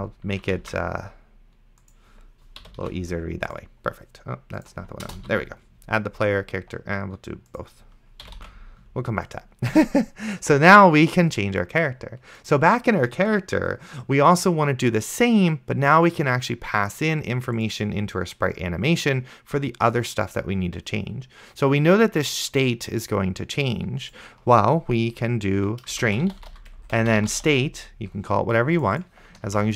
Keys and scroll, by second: 0.9 ctrl+z, 2.6 ,, 3.1 ctrl+s, 5.1 BackSpace, 5.5 ctrl+s, 8.3 ,, 8.7 ctrl+s, 25.9-27.9 typing.